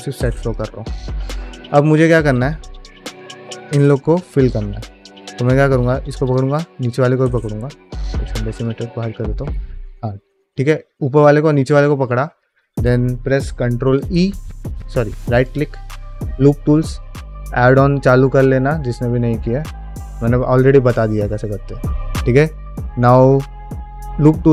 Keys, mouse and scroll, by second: 0.0 middle click, 0.3 click, 0.6 shift+middle click, 0.9 middle click, 1.2-1.6 scroll up 2, 1.6 shift+middle click, 2.2 scroll down 1, 2.4 middle click, 4.2 alt+click, 4.9 2, 6.1 alt+shift+click, 6.7 scroll down 1, 7.0 middle click, 8.4 click, 9.1 shift+middle click, 9.4-9.7 scroll up 1, 9.7 middle click, 10.0 shift+middle click, 10.4 middle click, 10.9-12.0 middle drag, 12.2 scroll down 1, 12.4 middle click, 13.8 ctrl+e, 15.2-24.5 right drag.